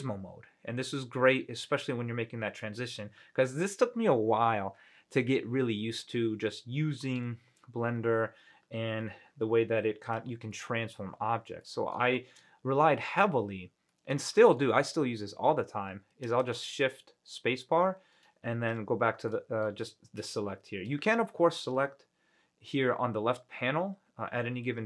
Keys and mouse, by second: 2.0-3.1 middle drag, 3.6 g, 7.4 y, 9.1 z, 10.2 click, 10.7-11.1 middle drag, 11.3 ctrl+z, 11.8-12.1 middle drag, 12.3 shift+click, 12.3 shift+middle drag, 12.5 click, 14.1-14.8 middle drag, 16.7 shift+space, 19.5-19.8 drag.